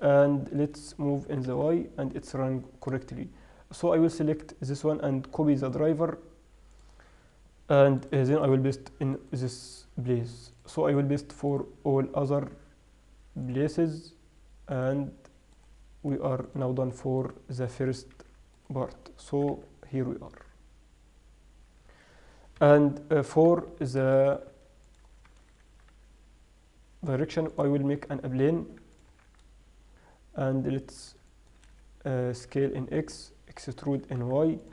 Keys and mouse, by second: 0.3-0.9 drag, 1.6 g, 2.6 click, 4.4-4.8 right drag, 7.8 right click, 11.3-11.8 right drag, 18.4 alt+h, 19.6 g, 22.8 KP_7, 23.8 n, 24.0-24.4 middle drag, 25.2 middle click, 25.6-26.8 drag, 25.6 shift+a, 28.7 s, 29.4 Tab, 32.3 right click, 32.7 s, 34.2 e.